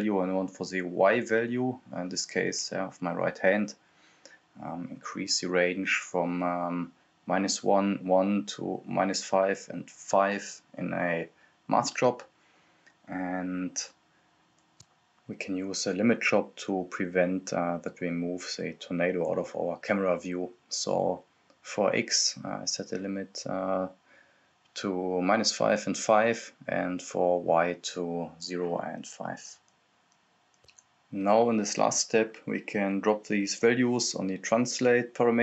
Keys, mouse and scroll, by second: 0.0 click, 2.9-3.6 scroll up 1, 3.6 click, 4.2 right click, 4.3-6.3 typing, 6.3 click, 7.3 ctrl+c, 7.9 click, 10.6 click, 11.8 click, 12.8 click, 14.0 ctrl+c, 14.1 ctrl+v, 14.8-16.0 drag, 16.9 right click, 17.3-19.5 typing, 24.8 ctrl+c, 24.9 ctrl+v, 25.5 click, 29.8 click, 29.8 Return, 31.1 click, 31.6 scroll down 1, 32.8 click.